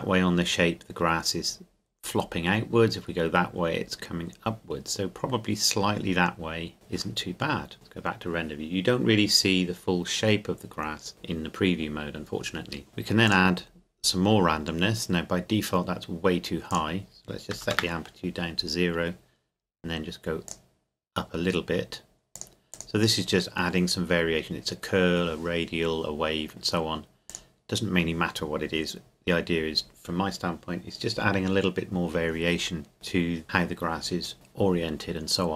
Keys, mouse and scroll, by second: 12.9 click, 16.7 click, 17.5 KP_0, 17.7 KP_Enter, 20.5 click, 27.3 click.